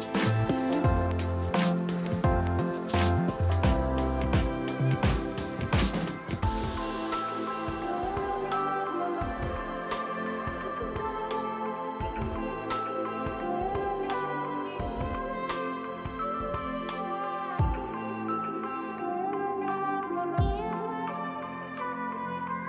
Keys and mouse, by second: 0.9 ctrl+click, 1.4 click, 3.0 ctrl+shift+click, 4.6 ctrl+shift+click, 4.9 ctrl+shift+click, 5.1 ctrl+click, 7.3 click, 13.0 click, 13.6 click, 13.8 alt+v, 13.9 click, 16.5 alt+y, 19.1 alt+y, 19.3 click, 20.2 ctrl+click, 20.9 click, 22.5 KP_0.